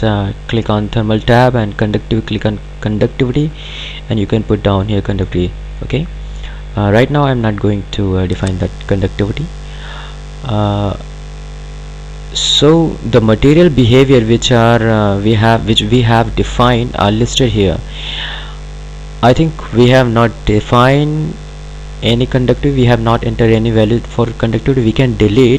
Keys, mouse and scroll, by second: 2.1 click, 9.3 click, 12.4 click, 19.5 click.